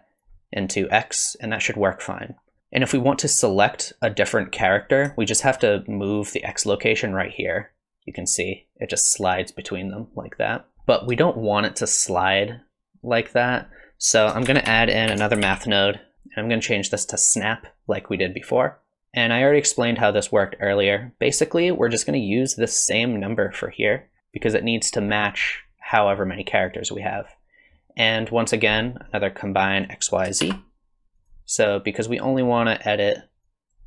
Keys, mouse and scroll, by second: 6.7 shift+click, 10.7 middle click, 10.7 click, 11.4 shift+click, 14.2 click, 14.5 shift+a, 16.1 click, 16.5 click, 18.6 click, 19.0 click, 20.0 click, 24.1 middle click, 24.2 click, 29.3 click, 30.0 click, 30.4 shift+d, 33.4 click.